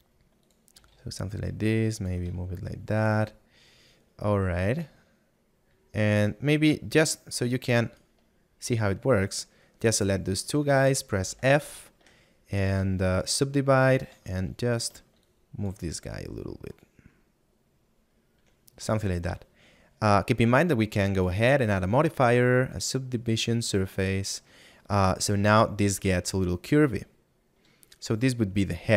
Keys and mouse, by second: 3.0 shift+middle click, 10.3 middle click, 11.9 middle click, 14.7 middle click, 15.3 shift+click, 16.7 click, 19.5 middle click, 22.7 click, 26.5 middle click.